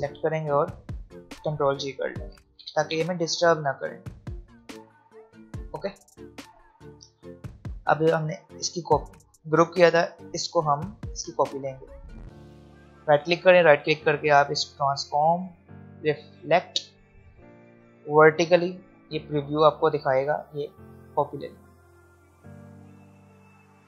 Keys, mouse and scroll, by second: 1.7-2.1 alt+scroll down 2, 3.3 right click, 5.3 click, 12.6-13.8 alt+scroll up 3, 13.8 alt+scroll down 1, 15.9-19.4 drag, 20.0 alt+scroll up 1, 20.7 alt+scroll down 1.